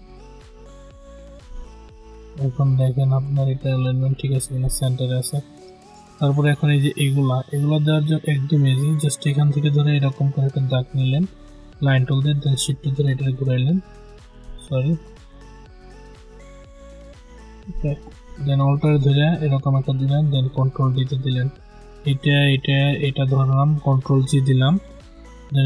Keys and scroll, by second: 14.3 ctrl+z, 20.3 ctrl+d, 24.4 ctrl+g.